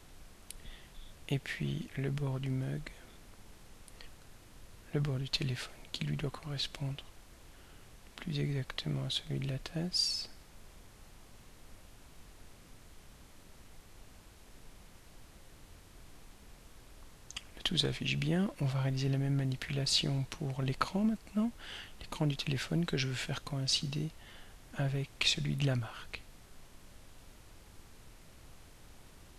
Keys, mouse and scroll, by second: 4.7 click, 6.8-10.5 drag, 12.4-15.3 drag, 18.8-19.2 scroll down 1, 19.6 scroll down 2, 22.1 click, 24.3-25.0 scroll up 2, 26.1-27.3 drag, 28.2-28.7 scroll down 2.